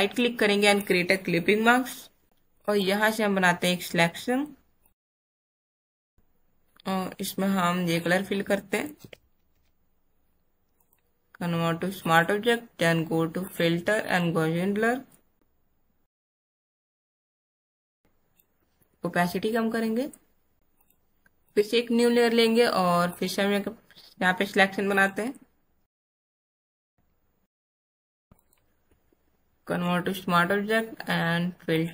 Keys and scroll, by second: 9.0 alt+BackSpace, 9.5 ctrl+d, 27.4 alt+BackSpace, 27.7 ctrl+alt+d.